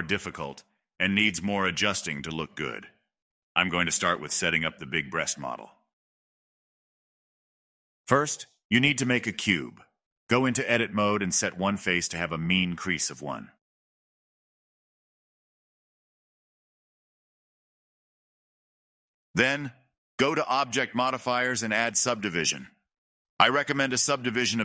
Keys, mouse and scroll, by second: 7.1-8.1 shift+middle drag, 8.1 shift+a, 10.2 middle drag, 10.4-11.5 scroll down 5, 11.5-12.3 drag, 12.3 middle click, 12.9 click, 13.5-15.0 middle drag, 15.0-18.2 drag, 18.2-19.3 middle drag, 19.3-21.6 drag, 23.5-24.6 drag.